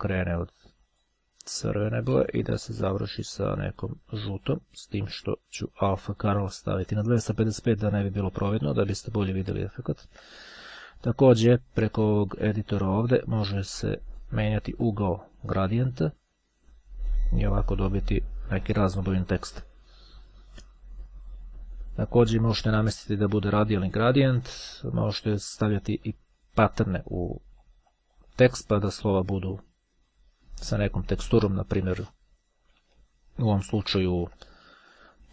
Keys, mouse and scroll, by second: 0.7 click, 1.7-3.1 drag, 4.7-5.7 drag, 6.2-7.6 drag, 9.1 click, 9.9-10.5 ctrl+scroll up 2, 12.4 click, 14.3-16.1 drag, 16.8-19.8 drag, 22.3 click, 25.0 click, 26.8 click, 27.7-28.4 scroll down 2, 29.7 click, 33.1-33.7 ctrl+scroll up 2, 35.1 click.